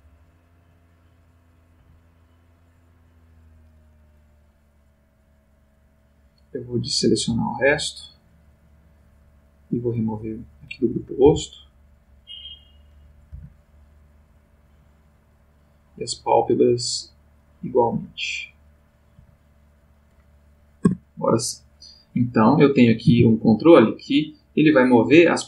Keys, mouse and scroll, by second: 0.8 click, 1.8 Right, 2.8 click, 3.9 click, 5.9 click, 6.8 click, 7.7 click, 9.7 click, 11.2 Left, 12.6 click, 13.3 Left, 14.5 click, 15.4 click, 17.3 click, 17.9 Right, 18.6 click, 19.1 Right, 19.7 click, 20.8 Tab, 22.3 click, 23.0 r.